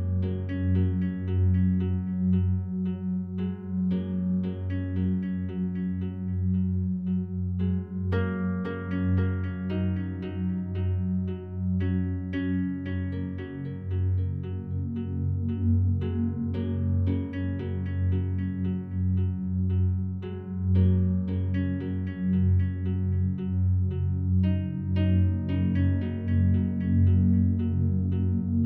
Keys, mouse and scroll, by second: 5.1 click, 6.0 click, 6.7 click, 7.3 click, 8.3 click, 9.5 click, 10.4 click, 13.8 click, 14.5-16.4 ctrl+shift+drag, 17.1 click, 17.9-20.1 drag, 20.9-23.1 ctrl+drag, 24.0 click, 26.0 ctrl+d, 27.0 shift+Right, 27.2 shift+Right.